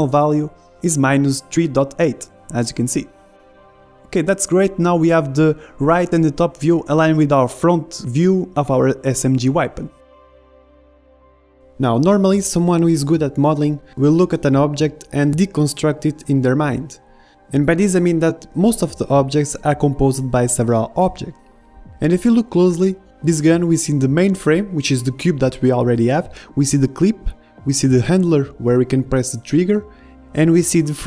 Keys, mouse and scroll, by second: 0.0-1.2 middle drag, 1.3-3.0 drag, 4.7-13.6 middle drag, 12.6 KP_1, 13.6 click, 13.6 KP_3, 13.7 middle click, 14.5 KP_7, 16.2 KP_1, 18.0 middle click, 25.2-31.0 middle drag.